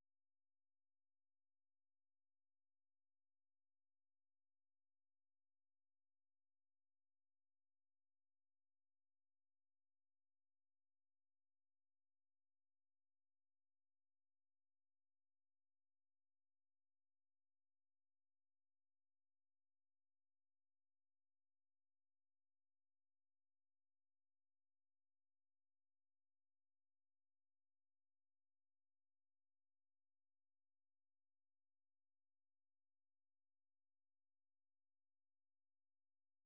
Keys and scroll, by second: 3.0-9.3 typing.